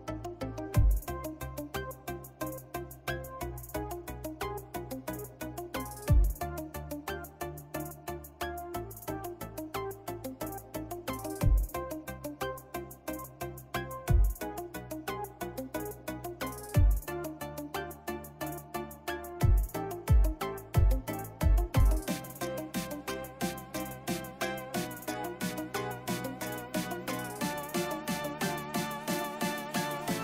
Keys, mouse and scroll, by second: 11.3 ctrl+-, 12.9 click, 14.9 right click, 16.4-17.6 drag, 17.6 click, 18.3 space, 20.3 click, 23.7-30.2 drag.